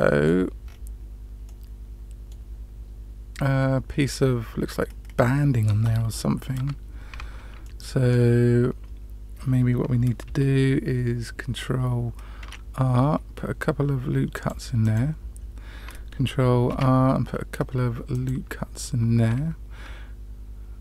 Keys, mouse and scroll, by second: 0.6-1.4 scroll up 3, 1.4-2.3 middle drag, 6.5 Tab, 7.1 scroll up 1, 7.6 shift+middle click, 12.3 ctrl+r, 16.6 ctrl+r.